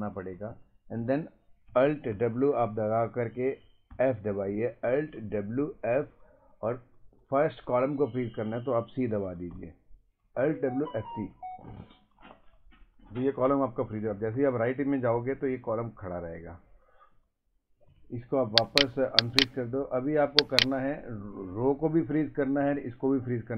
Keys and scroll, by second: 2.1 w, 3.9 f, 9.5 c, 14.1 Right, 15.5 Left, 17.1 Right, 21.3 Up, 22.7 Left.